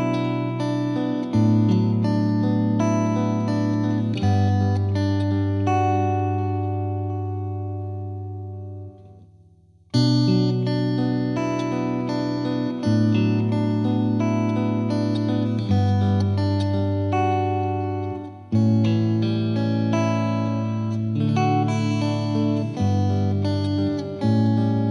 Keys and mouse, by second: 1.4 click, 1.9 click, 3.7 click, 8.5 click, 12.6 click, 13.3 click.